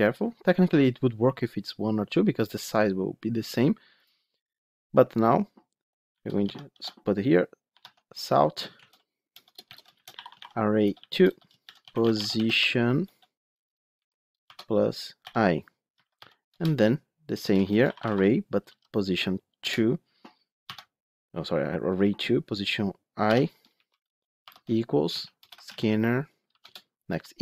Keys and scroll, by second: 7.7 Tab, 15.8 Escape, 17.7 Escape, 23.5 Return, 26.6 Return.